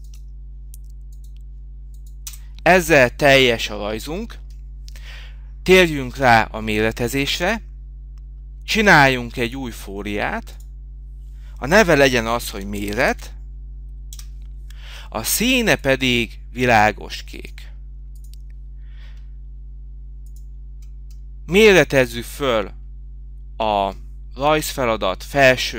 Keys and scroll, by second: 16.5 Escape.